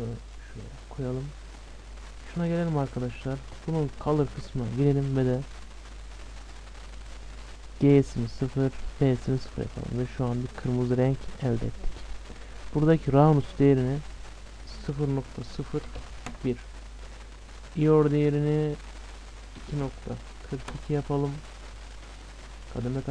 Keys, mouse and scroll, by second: 1.9 scroll up 1, 2.0-4.0 middle drag, 4.0-4.7 scroll up 1, 4.4-6.3 drag, 6.4-8.4 drag, 13.5-15.4 drag, 17.7-19.5 drag, 21.7-23.1 middle drag.